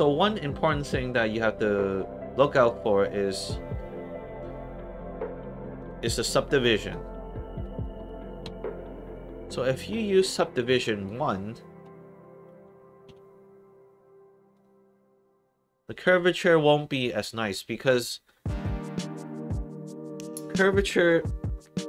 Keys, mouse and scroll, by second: 0.5 click, 5.7 click, 6.7 click, 7.8 alt+click, 8.9 alt+click, 10.1 alt+click, 10.7 alt+click, 12.1 alt+click, 13.1 1, 14.5 click.